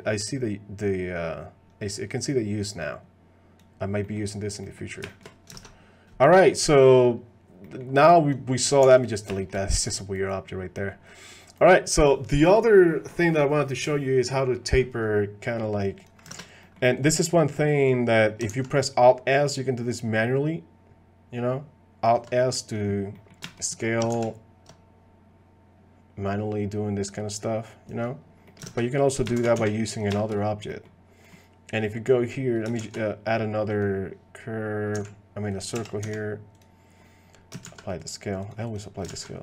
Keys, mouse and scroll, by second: 0.3-3.6 drag, 4.0 middle click, 4.6 middle click, 5.1 shift+click, 5.6 ctrl+Tab, 7.6 middle click, 8.3 click, 8.6 click, 8.8 x, 9.4 shift+middle click, 10.7 middle click, 16.4 ctrl+Tab, 16.6 click, 17.0 click, 17.9 click, 19.1 alt+s, 23.2 click, 23.4 shift+click, 24.4 alt+s, 28.4 click, 28.8 ctrl+Tab, 29.4 shift+d, 30.1 shift+drag, 30.7 click, 31.2 click, 31.8 click, 32.8 shift+a, 34.9 s, 35.7 g, 37.6 ctrl+a, 38.4 click, 38.6 click, 39.3 ctrl+a.